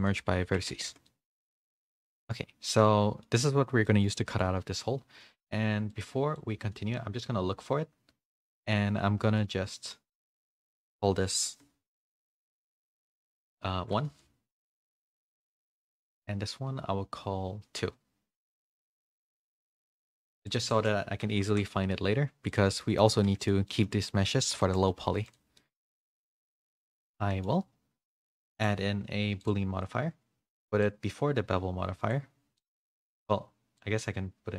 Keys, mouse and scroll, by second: 0.4 Tab, 0.8 a, 1.0 middle click, 1.4 a, 1.6 a, 1.7 middle click, 2.1 click, 2.3 middle click, 3.8 middle click, 4.2 click, 5.9 click, 9.2-10.5 middle drag, 10.5-14.5 drag, 20.5-21.7 drag, 22.8 middle click, 23.0 a, 23.2 a, 23.6 middle click, 24.6 shift+middle click, 25.0 a, 25.2 click, 25.5 middle click, 26.1 click, 26.7 middle click, 28.6 click, 30.8-32.1 drag, 32.5-33.7 middle drag, 33.7 click.